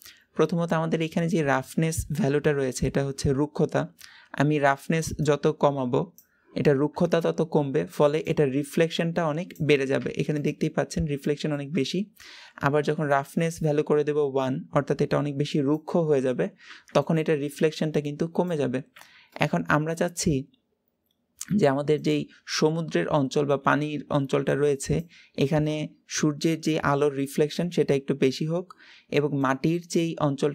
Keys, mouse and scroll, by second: 3.3-5.2 scroll up 1, 5.2-10.3 drag, 10.3 middle click, 10.7-11.1 scroll up 2, 11.1-13.2 shift+middle drag, 13.2-19.2 drag, 19.2-30.5 middle drag.